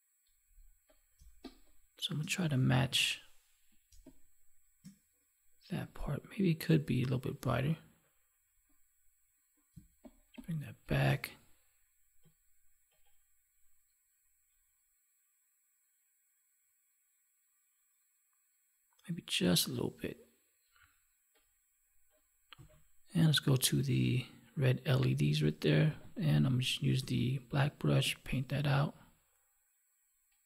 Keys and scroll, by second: 1.1 space, 9.6 space.